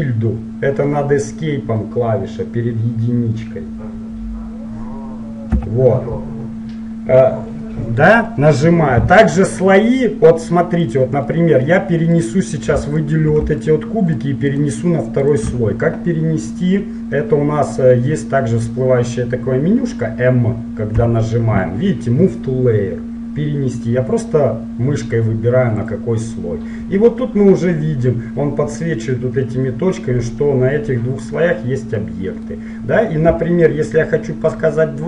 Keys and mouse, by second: 5.6 `, 8.4 middle click, 9.6-17.4 drag, 12.3 right click, 21.0 m, 32.1-34.8 middle drag.